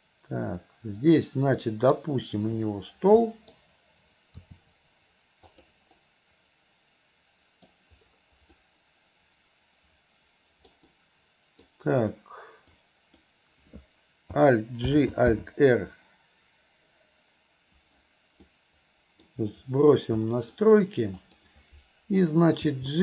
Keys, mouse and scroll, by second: 1.1-2.0 scroll up 1, 3.3 scroll up 1, 3.4 middle drag, 4.5 r, 6.0-7.7 middle drag, 8.6-10.8 middle drag, 8.6-10.1 scroll down 1, 10.1-12.8 scroll down 1, 11.0-11.7 middle drag, 12.8 click, 15.0 alt+g, 18.5-19.3 middle drag, 20.3 middle drag, 21.2 click, 22.8 g.